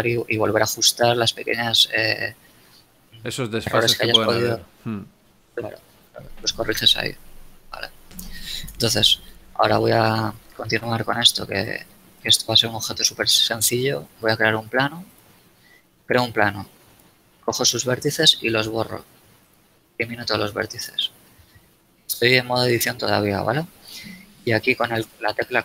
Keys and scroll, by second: 1.3 a, 2.9 z, 8.6 KP_1, 11.6 shift+a, 13.6 a, 17.3 Tab, 18.3 x, 21.0 KP_1.